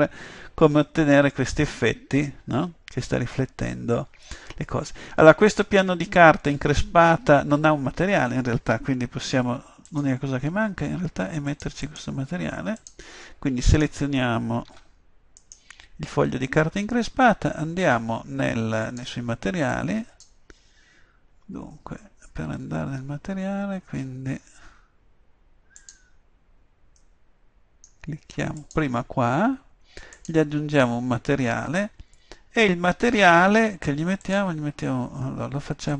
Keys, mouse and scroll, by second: 10.0 click, 14.8 Tab, 18.9-21.6 drag, 25.9-32.0 drag, 34.3-35.9 drag.